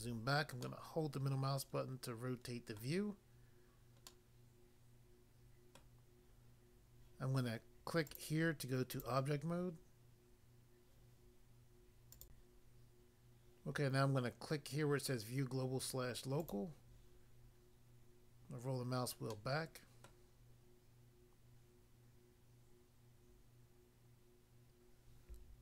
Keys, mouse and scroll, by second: 2.8 middle click, 4.1 middle click, 5.8 middle click, 8.1 click, 8.2 click, 9.0 click, 9.1 click, 12.2 click, 12.4 click, 16.4 click, 16.6 click, 18.4 scroll down 1, 19.3 middle click, 19.3 scroll down 1, 20.0 middle click.